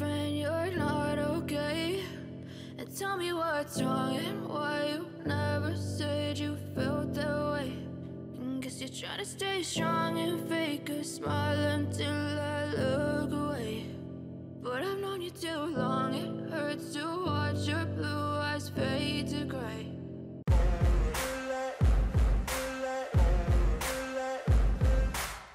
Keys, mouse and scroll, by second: 8.4 double click, 15.3 shift+click, 20.9 ctrl+-, 21.3 ctrl+-, 21.6 ctrl+=, 24.3-25.5 scroll up 1.